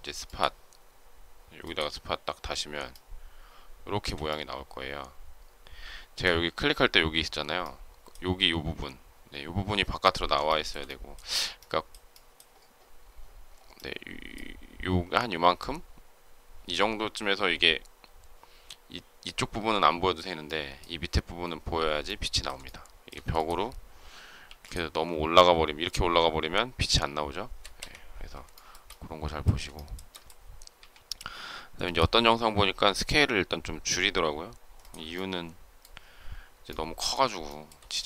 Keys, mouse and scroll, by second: 2.8 shift+middle click, 10.4 shift+middle click, 22.5 shift+middle click, 24.3 m, 27.7 Escape, 28.4 shift+middle click, 29.6 shift+middle click, 30.7 s, 34.7 ctrl+click, 37.4 shift+middle click.